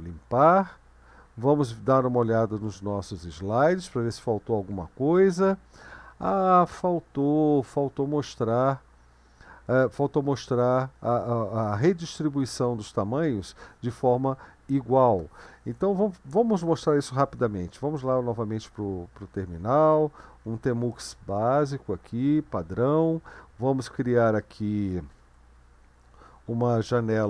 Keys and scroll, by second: 2.7 super+1, 18.7 super+2, 20.0-21.3 typing, 25.1 ctrl+b.